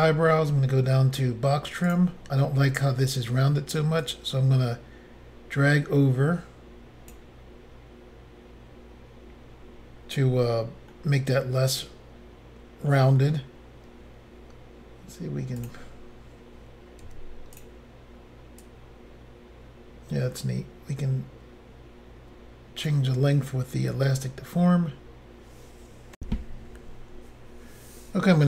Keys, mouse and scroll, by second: 1.9 click, 2.0 click, 4.0 click, 10.9 middle click, 13.8-14.1 scroll up 1, 15.6 click, 17.1 f, 17.6 click, 17.6 click, 18.6 click, 23.8 scroll down 1, 24.5-25.0 scroll down 2, 26.2 Insert.